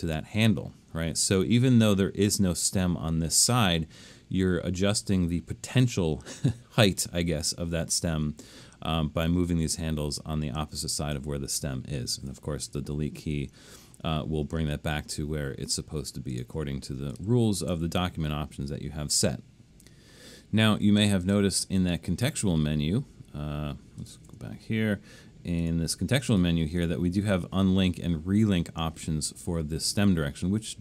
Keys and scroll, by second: 12.7 BackSpace, 17.1 super+z, 17.7 super+z, 24.3 BackSpace.